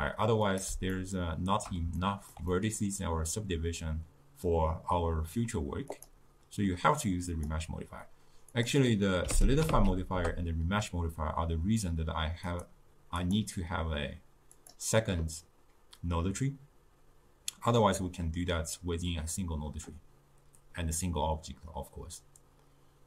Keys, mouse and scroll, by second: 1.1-5.7 shift+middle drag, 7.6-11.7 drag, 12.6-14.8 drag.